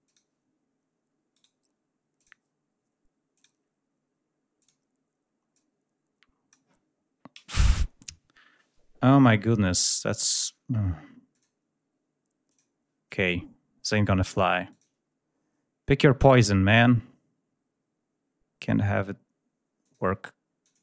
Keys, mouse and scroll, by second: 0.0 click, 1.3 right click, 2.1 click, 3.3 click, 4.5 click, 5.5-6.6 drag, 11.3 click, 12.4 click, 13.8 click, 14.6 click, 19.8 click, 20.6 click.